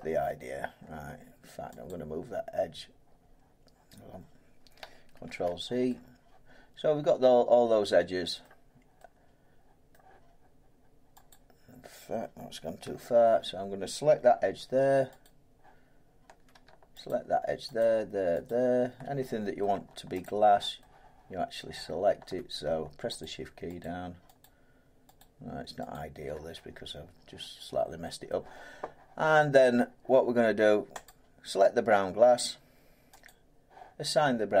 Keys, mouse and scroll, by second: 0.5-1.8 scroll down 2, 1.8 click, 1.8-4.1 scroll down 1, 5.2 ctrl+z, 8.4 middle click, 9.9 middle click, 11.3 click, 13.5-14.9 scroll, 15.2 click, 17.1 shift+click, 17.8 shift+click, 19.6 middle click, 20.2 click, 21.5 middle click, 23.2 click, 23.8 click, 28.2 middle click, 31.0 click, 33.2 click.